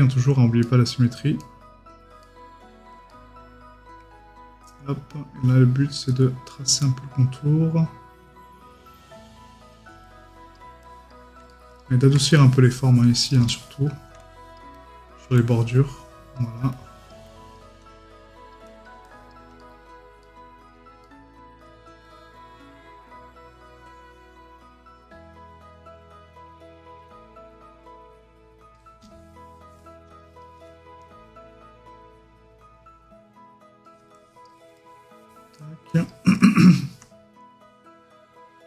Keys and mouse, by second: 0.6 right click, 11.5 right click, 19.6 right click, 29.0 middle click, 34.8 middle click, 36.3 middle click.